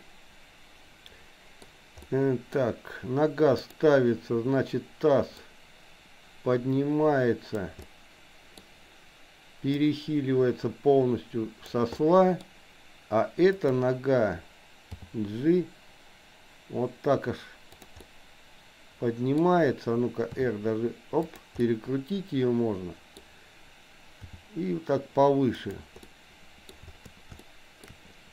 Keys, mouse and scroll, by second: 0.0-1.6 middle drag, 2.1 middle click, 3.7 click, 5.3-7.7 drag, 7.8 middle click, 9.7-11.8 drag, 12.0 middle click, 13.7 click, 15.0 g, 18.0-19.5 middle drag, 20.5 r, 21.6-23.2 middle drag, 24.2 g, 26.1 middle click, 27.5 shift+middle click.